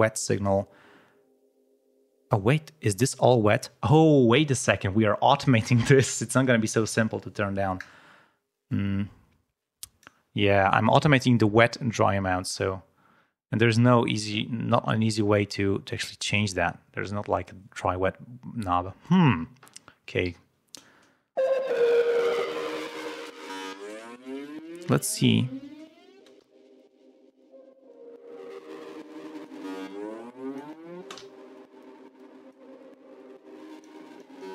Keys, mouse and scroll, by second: 8.6-10.2 drag, 19.0 click, 20.2 l, 22.2-23.4 drag, 26.1 space, 26.3 l, 27.9-29.6 drag, 29.8 click, 30.9 space, 31.2 l, 32.1 click, 33.2 click, 33.5 click, 34.1 click.